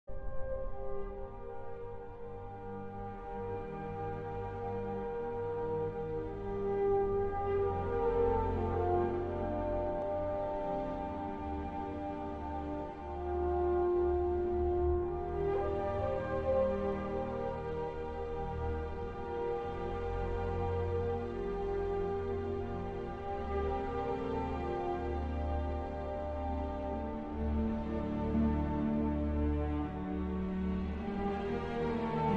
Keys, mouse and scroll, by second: 1.2 click, 1.7 click, 4.7 click, 5.5 click, 9.9 w, 11.4 space, 11.9 d, 23.8 w, 24.9 d, 25.9 s, 27.5 a, 28.5 w, 30.5 d, 32.3 space.